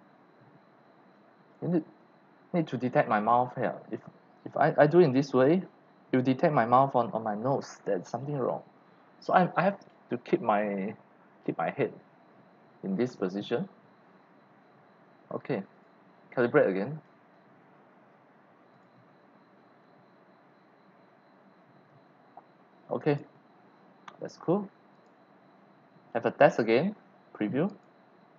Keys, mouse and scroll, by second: 2.9-4.4 drag, 15.7 click, 15.9 drag, 16.9 click, 18.7 click, 20.2 click, 22.8 click, 24.9 click, 27.7 click.